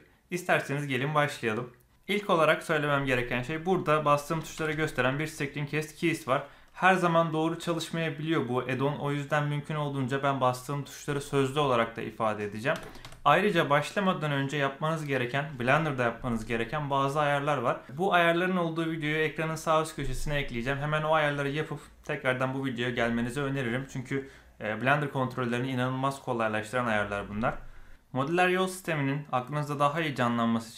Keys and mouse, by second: 4.4 a, 4.8 a, 12.7 a, 13.0 a.